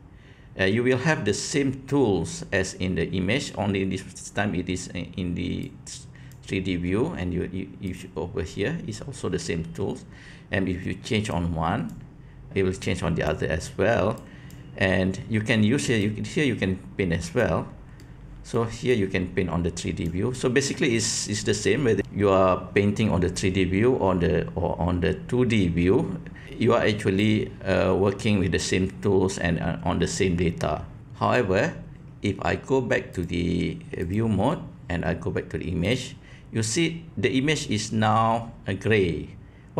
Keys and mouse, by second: 5.6 click, 7.8 click, 11.3 click, 12.9 click, 14.2 click, 16.0-17.4 drag, 18.0 middle click, 19.0-20.0 drag, 20.4 middle click, 27.2-28.6 drag, 33.1-34.1 drag, 35.8 click.